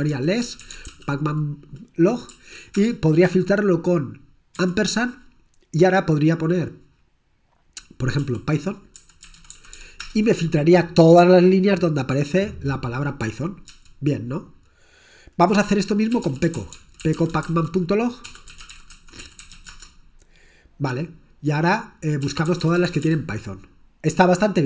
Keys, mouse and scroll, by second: 0.0-1.4 typing, 2.4 Right, 2.8 Return, 4.6 shift+7, 8.5-10.3 typing, 13.9 q, 16.0-23.6 typing.